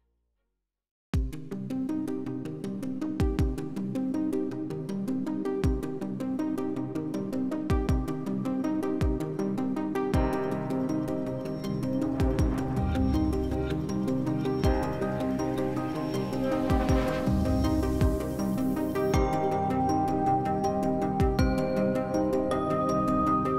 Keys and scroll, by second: 8.4 s, 13.9 s, 17.0 ctrl+z, 17.3 ctrl+z.